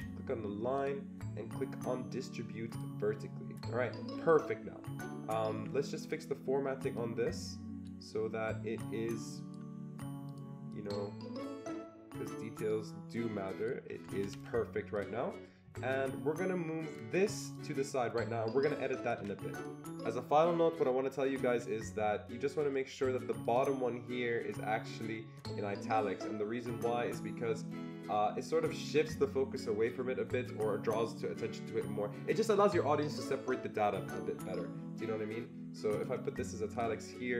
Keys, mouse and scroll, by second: 0.8-2.7 drag, 2.7 click, 5.4 Escape, 5.6 Escape, 6.0 click, 7.0-10.7 drag, 10.7-14.9 drag, 14.1 Escape, 14.3 Escape, 15.9-17.5 drag, 17.5-19.8 shift+drag, 19.8 click, 23.4 click, 23.5 click, 25.3 click, 35.9-36.7 click.